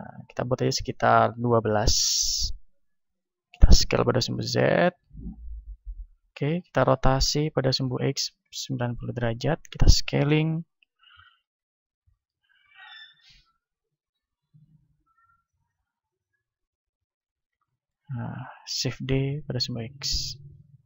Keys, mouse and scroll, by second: 2.9-5.0 middle drag, 3.8 s, 5.0-7.0 drag, 7.3 r, 9.0-12.2 drag, 9.6 s, 11.2-14.2 middle drag, 11.6 z, 12.6 s, 14.2-18.8 drag, 17.2 z, 17.6-20.1 middle drag, 19.1 shift+d.